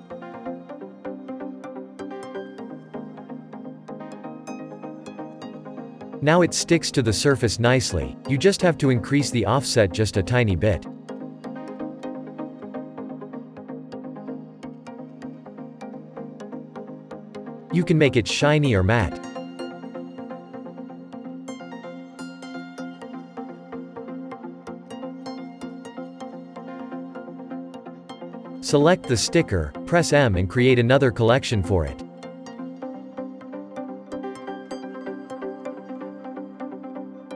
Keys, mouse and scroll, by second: 0.0-1.3 drag, 1.3 scroll up 1, 1.7-2.9 shift+middle drag, 2.9-4.6 scroll down 1, 4.6 click, 6.7-9.9 shift+middle drag, 9.9-12.1 drag, 12.1-14.7 shift+middle drag, 14.7 click, 15.5 click, 17.4-24.0 drag, 25.1 click, 27.0 click, 30.2 m.